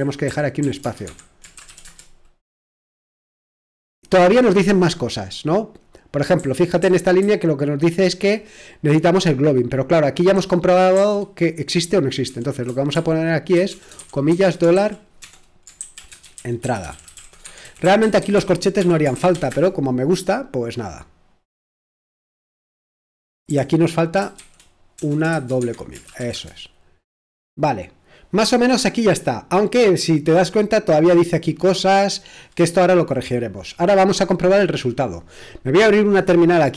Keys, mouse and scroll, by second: 0.0-1.8 typing, 6.4-8.5 typing, 10.9 l, 12.3-19.6 typing, 23.5-26.6 typing, 25.6 Escape.